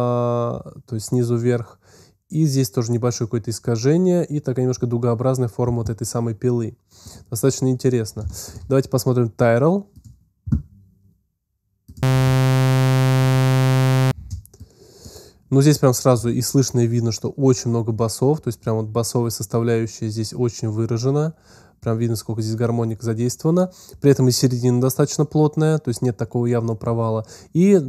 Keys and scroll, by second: 11.9 space, 14.5 space.